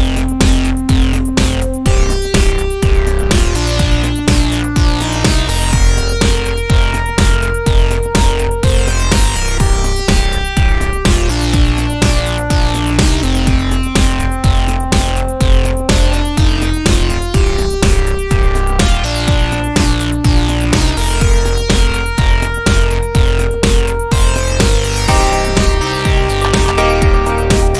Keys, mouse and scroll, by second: 1.4 a, 1.8 middle click, 2.0-4.1 middle drag, 3.4 click, 5.9-8.3 right drag, 6.7 middle click, 6.8 alt+d, 8.3 click, 11.8 shift+a, 14.4 click, 16.0 middle click, 16.8 KP_1, 18.7-20.0 middle drag, 18.7 z, 20.4-21.6 middle drag, 20.8 Tab, 21.6-23.9 right drag, 22.6 click, 24.4-27.7 middle drag.